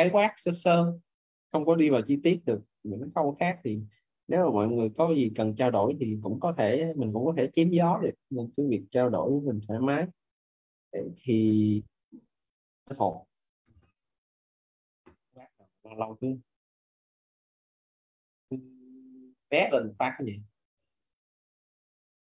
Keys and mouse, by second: 21.3 click.